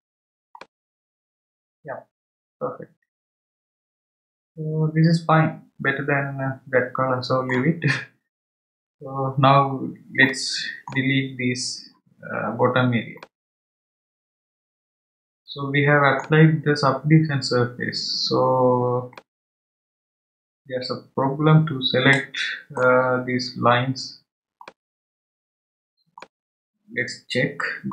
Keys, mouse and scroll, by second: 0.5-3.6 middle drag, 9.4-10.2 scroll down 1, 10.2-16.2 middle drag, 19.1-22.2 middle drag, 24.6-27.8 middle drag.